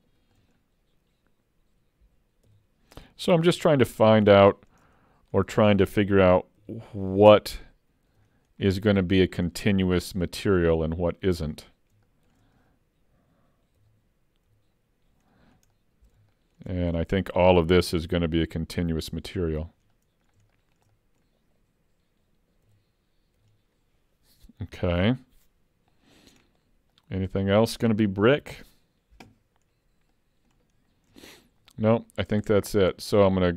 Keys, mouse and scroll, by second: 2.5 l, 3.5 l, 3.9 middle click, 4.5 shift+middle click, 4.9 middle click, 6.7 l, 8.1 l, 8.6 scroll down 2, 9.0 shift+middle click, 9.6 middle click, 10.3 shift+middle click, 10.9 middle click, 11.7 scroll up 1, 12.1 shift+middle click, 13.8 l, 14.5 l, 15.8 middle click, 16.3 shift+middle click, 16.7 middle click, 18.4 l, 19.6 l, 19.9 middle click, 20.6 shift+middle click, 20.9 middle click, 22.6 l, 23.4 l, 26.4-27.0 scroll down 2, 27.0 middle click, 27.0 scroll down 2, 29.7 scroll down 1, 30.1 middle click, 30.9 scroll down 1, 31.2 shift+middle click, 31.7 middle click, 32.6 middle click.